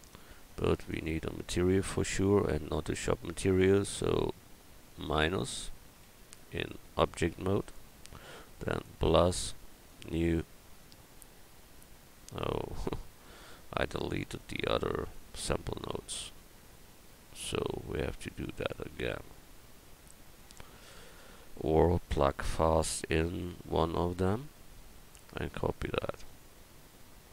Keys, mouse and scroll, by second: 6.2 Tab, 19.0 x.